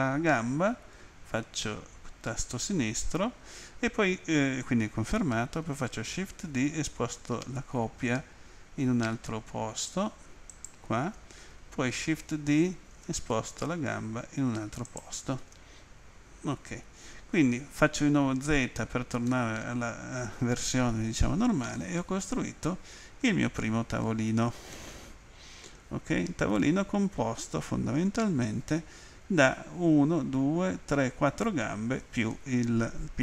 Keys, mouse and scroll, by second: 10.5 ctrl+click, 12.3 d, 14.8 ctrl+click, 19.3 middle click, 24.7 middle click.